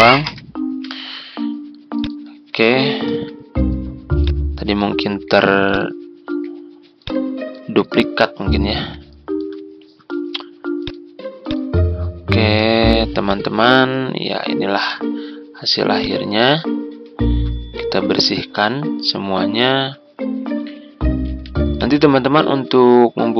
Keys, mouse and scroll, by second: 0.2 Delete, 1.9 click, 3.1 Delete, 4.2 click, 5.1 Delete, 5.7 click, 6.2 Delete, 6.9 click, 7.5 Delete, 8.7 z, 9.1 click, 9.8 click, 12.5 Delete, 13.2 click, 13.5 Delete, 14.8 F4, 16.0 click, 18.0 Delete, 19.5 F4, 21.2 z, 21.7-23.3 drag.